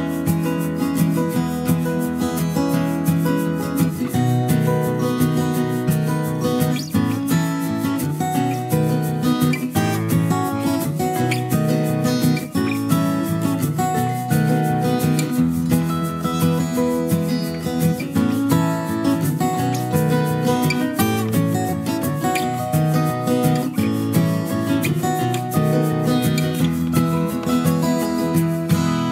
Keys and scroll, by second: 0.5 ctrl+k.